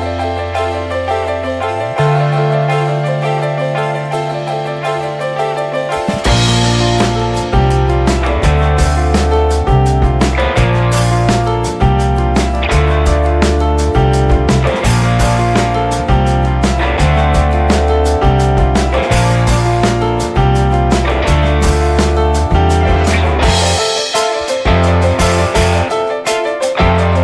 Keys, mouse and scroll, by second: 0.5 shift+a, 1.6 ctrl+a, 2.6 shift+middle click, 2.8-3.1 scroll up 2, 3.1 Tab, 3.4 click, 4.6-7.0 shift+drag, 7.3-9.5 shift+drag, 9.7 ctrl+z, 10.3-11.8 shift+drag, 11.8-13.3 middle drag, 13.3 alt+scroll up 1, 13.4-13.8 alt+scroll down 1, 13.8 alt+middle click, 14.3-14.8 shift+middle drag, 15.4 alt+middle click, 16.0-17.8 shift+middle drag, 17.8-19.6 shift+drag, 19.6-20.9 alt+middle drag, 20.9 click, 21.1 scroll down 2, 21.3-21.8 middle drag, 21.8 ctrl+s, 22.0-23.0 alt+middle drag, 23.0 ctrl+s, 23.2-23.8 middle drag, 23.8 scroll down 1, 24.0 middle click, 24.2 scroll up 1, 24.4-24.8 shift+middle drag, 24.8 ctrl+s, 25.0 shift+middle click, 25.8-27.2 shift+drag.